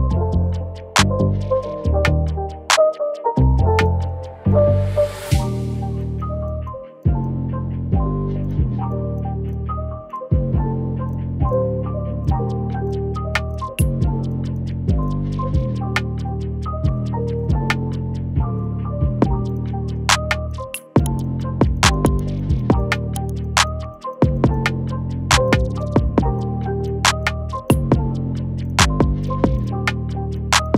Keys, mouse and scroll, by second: 29.6 double click.